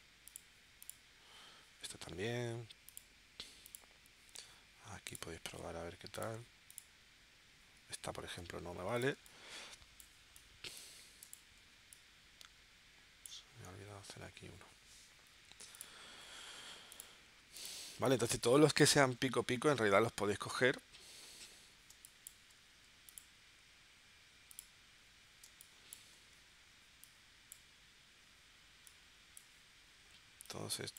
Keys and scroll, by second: 9.1 space, 18.2 space, 21.9 space, 25.4 space.